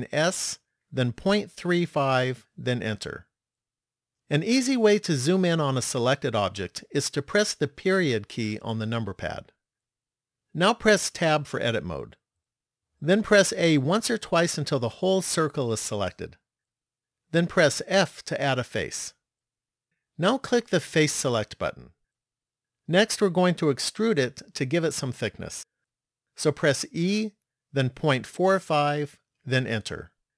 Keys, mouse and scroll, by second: 7.9 KP_Decimal, 11.3 Tab, 13.7 a, 14.4 a, 17.9 f, 21.6 click, 26.7 e.